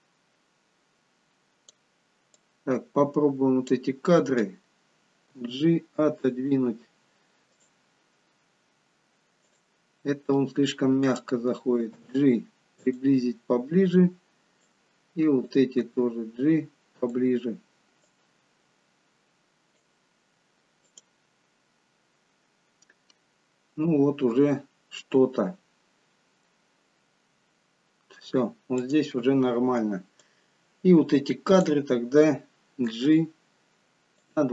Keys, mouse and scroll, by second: 0.5 click, 2.4 click, 5.4 g, 7.5 click, 9.6 click, 11.9 click, 12.0 g, 14.8 click, 15.9 g, 18.1 click, 20.9 click, 28.9 click, 30.2 click, 33.1 g.